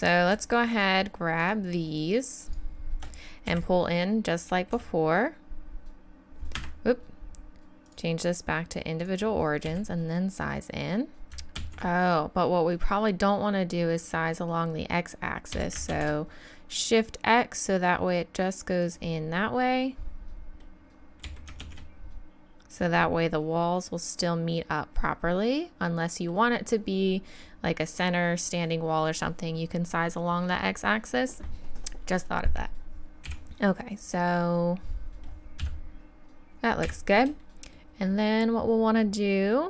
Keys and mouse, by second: 3.5 s, 4.8 s, 7.9-8.8 right drag, 9.7 s, 11.6 ctrl+z, 15.5 s, 19.2 click, 21.2 s, 33.3 KP_1, 35.6 KP_3, 36.9 KP_1.